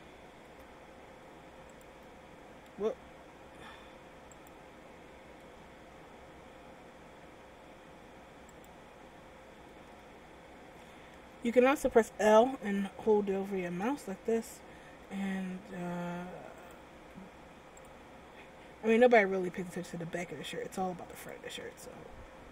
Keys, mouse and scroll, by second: 0.6 g, 2.0 s, 5.6 g, 10.0 a, 11.1 l, 15.0 g, 17.1 s, 19.1 g.